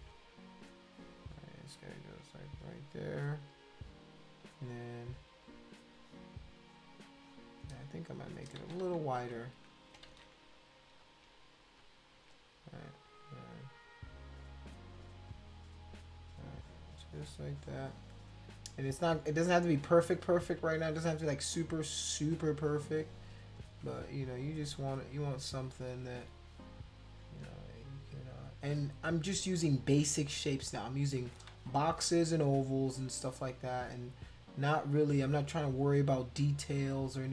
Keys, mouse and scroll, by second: 0.8 click, 1.8 shift+click, 4.9 click, 5.1 click, 5.6 click, 5.9 click, 6.4 click, 6.6 click, 7.2 click, 8.6 ctrl+z, 8.8 ctrl+z, 9.2 ctrl+z, 10.1 ctrl+z, 11.0 click, 11.8 shift+click, 14.0 click, 14.9 click, 15.2 click, 15.4-17.3 drag, 17.5 click, 17.9 click, 23.6 click, 27.1 click, 27.5 click, 29.0 click, 29.6 click, 29.9-30.9 drag, 31.5 ctrl+z, 32.6 click, 32.9 click, 33.7 shift+click, 34.2 shift+click, 34.5 shift+click, 35.0-36.4 drag, 36.6 click.